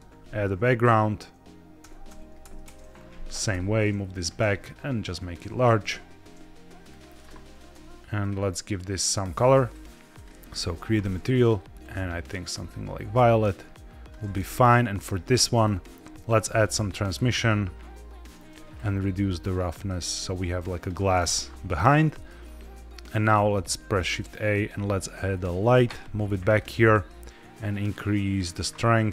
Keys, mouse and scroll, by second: 1.7-4.3 typing, 2.5 KP_Enter, 4.0 click, 5.2 click, 5.5 g, 5.7 y, 6.8 click, 7.4 g, 7.6 y, 8.1 click, 9.5 click, 10.0 click, 10.4 click, 11.3 click, 14.4 click, 15.4 click, 16.1 ctrl+z, 16.2 click, 16.9-18.1 drag, 20.8 click, 21.9 middle drag, 22.2-23.1 scroll down 3, 23.2 shift+a, 25.6 g, 25.8 y, 26.4 click, 27.1-28.3 drag, 29.0-29.1 drag.